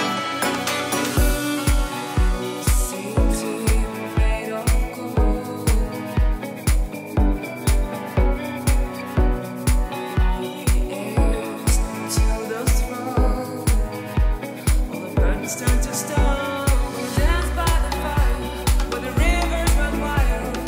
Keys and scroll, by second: 4.1 super+z, 4.6 super+z, 7.0 space, 12.2 space, 12.8 super+z, 14.0 shift+super+z, 14.6 super+z, 18.8 super+z, 19.6 space.